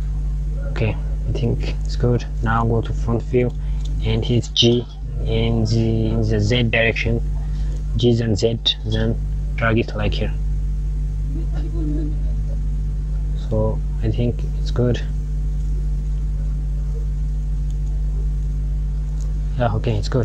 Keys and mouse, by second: 2.2 KP_1, 3.6 g, 13.8 click, 18.2 KP_1, 20.1 Tab.